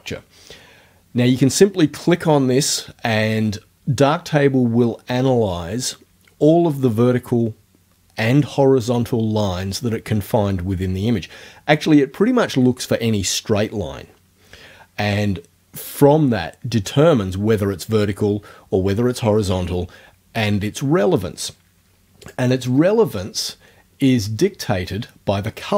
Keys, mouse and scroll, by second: 22.3 click.